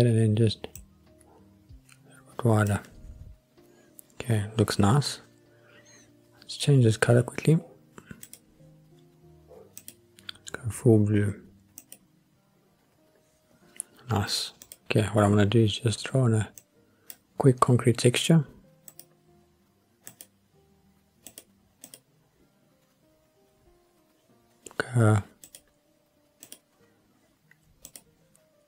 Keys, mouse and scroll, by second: 0.7 click, 1.6-2.7 drag, 8.2 click, 9.7 click, 14.6 click, 16.6 click, 18.9 click, 20.1-21.6 drag, 21.9-25.7 drag, 26.4 click, 27.9 click.